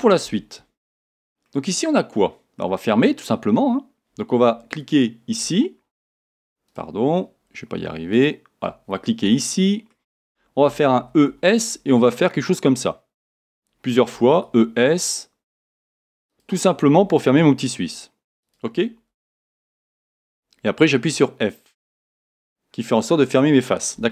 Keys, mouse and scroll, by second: 4.8 alt+click, 5.9 a, 6.7 alt+click, 8.1 alt+click, 9.3-18.5 shift+middle drag, 11.3 e, 13.5 click, 16.4 click, 17.3 click, 17.3 e, 18.5 click, 21.6-24.1 middle drag, 21.6 f.